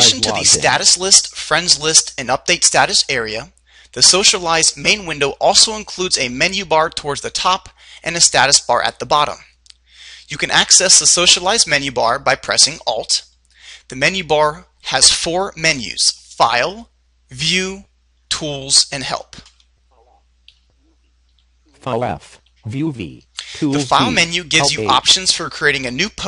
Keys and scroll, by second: 20.7 Right, 21.6 Right, 22.7 Right.